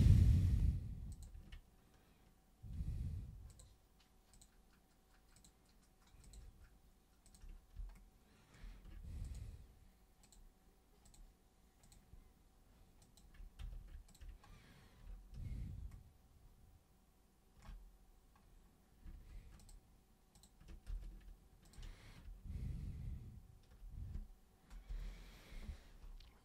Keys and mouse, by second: 1.1 super+click, 3.5 ctrl+shift+super+click, 4.3 ctrl+shift+super+click, 5.3 ctrl+shift+super+click, 6.2 ctrl+shift+super+click, 7.2 ctrl+shift+super+click, 9.2 shift+click, 10.2 shift+click, 11.0 shift+click, 11.8 shift+click, 13.0 shift+click, 13.6 z, 14.1 ctrl+shift+super+click, 19.6 ctrl+shift+super+click, 20.3 ctrl+shift+super+click, 20.8 ctrl+super+z, 21.6 ctrl+shift+super+click.